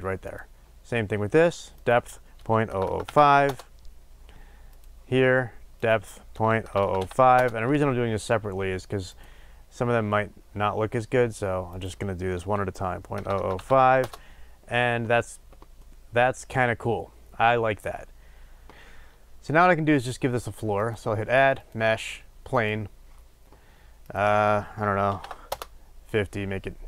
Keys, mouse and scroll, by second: 3.4-4.8 drag, 3.4 KP_0, 3.5 Return, 7.3-9.1 drag, 7.3 KP_0, 7.4 Return, 14.0-15.8 drag, 14.0 KP_0, 14.1 Return, 15.8-22.6 middle drag, 22.6-25.7 drag, 25.7 Return, 26.2-26.8 drag.